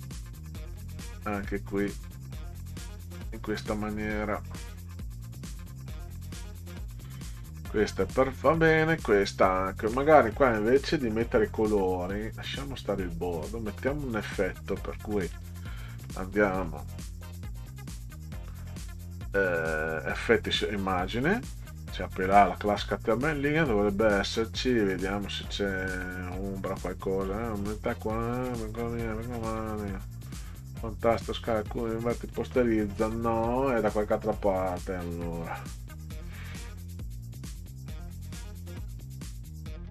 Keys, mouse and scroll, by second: 1.7 click, 2.9 click, 3.6-6.6 drag, 7.3 click, 8.3 click, 11.1 click, 13.2 click, 15.3 click, 16.5 right click, 20.8 click, 32.3 click, 35.7-36.1 scroll up 2, 37.5 click, 38.9-39.3 scroll down 4.